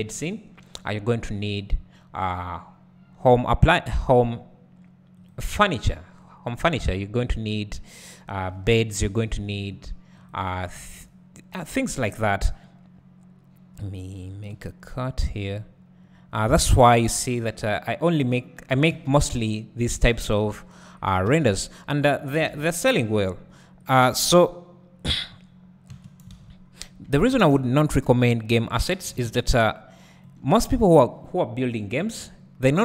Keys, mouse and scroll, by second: 3.3 k, 9.4 ctrl+r, 10.8 `, 15.0 k, 21.4 space, 22.5 alt+a, 23.0 k, 26.0 space, 26.3 space, 27.2 alt+a, 27.5 `, 28.9 click, 29.5 g, 30.3 right click, 32.0-32.8 drag.